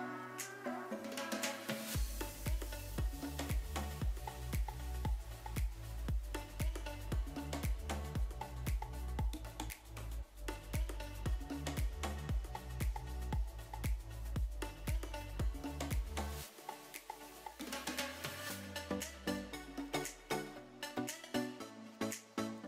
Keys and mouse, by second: 0.7 KP_1, 2.3-3.5 middle drag, 4.0 g, 5.6 click, 6.2 s, 6.7 click, 7.2 middle click, 9.5 s, 10.1 click, 11.1 middle click, 12.1 s, 12.6 click, 14.4 s, 15.0 click, 17.0 s, 17.5 click, 18.2 g, 18.6 click, 19.2 e, 19.9 click, 20.3 e, 20.9 click, 21.2 s, 22.0 click, 22.5 g.